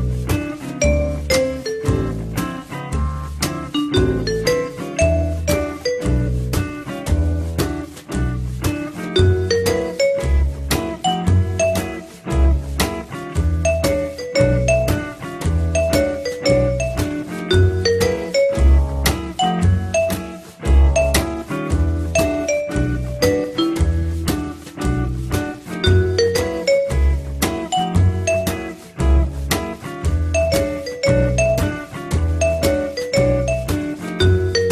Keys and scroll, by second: 9.7 2.